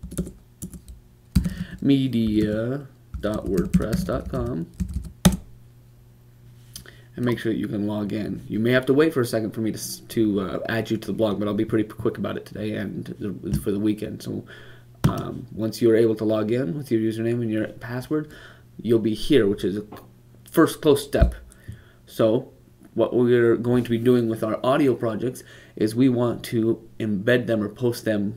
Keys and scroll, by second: 3.0-5.7 typing.